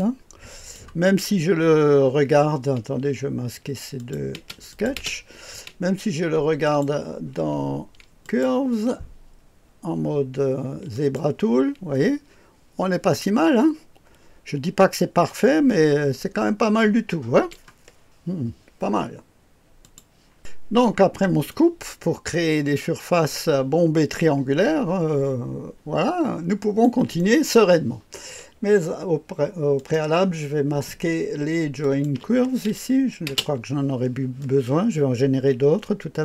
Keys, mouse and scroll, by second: 1.3-3.8 scroll up 1, 3.9 click, 4.3-5.0 typing, 4.8 click, 6.6 click, 8.2 click, 10.9 click, 11.9-17.5 drag, 19.8 click, 21.5-26.8 drag, 27.1 click, 27.1 right click, 29.7 click, 31.8 shift+click, 33.2 space, 34.4-36.2 drag.